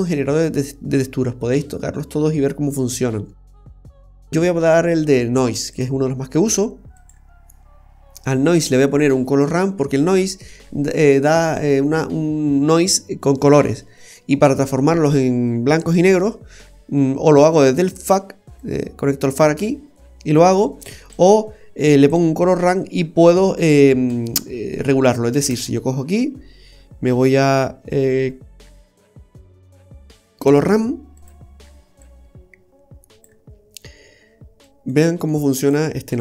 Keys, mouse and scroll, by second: 6.9 typing, 18.6 click, 20.6 click, 23.5 click, 25.4 shift+a, 31.2 typing, 32.0 click, 34.6 click, 35.3 click.